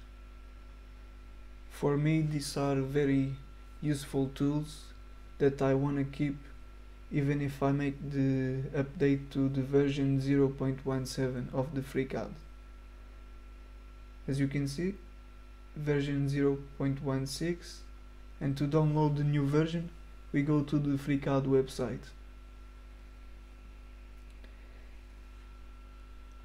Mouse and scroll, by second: 1.1 click, 3.9 click, 4.6 scroll down 1, 5.2 click, 6.4 click, 7.2 middle click, 7.3 right click, 7.6 middle click, 10.4 click, 11.4 click, 15.0 click, 16.5 click, 20.6 click.